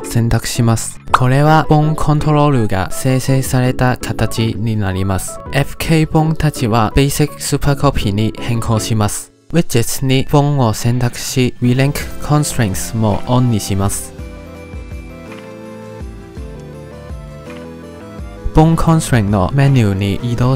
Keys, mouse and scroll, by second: 5.5 click, 5.7-6.1 scroll down 10, 6.1-7.4 scroll up 1, 7.4-9.8 drag, 9.8-10.1 scroll down 3, 10.1 ctrl+z, 10.5-12.0 drag, 12.8 click, 14.3 click, 14.6 scroll down 4, 15.0 shift+middle click, 15.1 click, 15.2 scroll down 1, 15.3 click, 15.7 click, 15.9 click, 16.3 click, 16.5 click, 16.9 shift+middle click, 17.0 click, 17.7 click, 17.8 scroll down 1, 17.9 click, 19.1 click, 19.8 click.